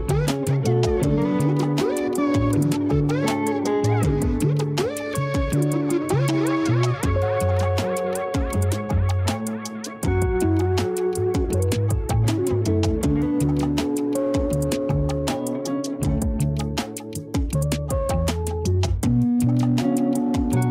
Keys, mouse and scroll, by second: 2.5-4.8 drag, 5.5 click, 10.9 s, 13.4 a, 13.5 a, 14.2-16.1 scroll up 2, 16.1-17.7 scroll down 6, 17.7-18.5 middle drag, 18.5-18.9 scroll down 8, 19.4-20.7 shift+middle drag.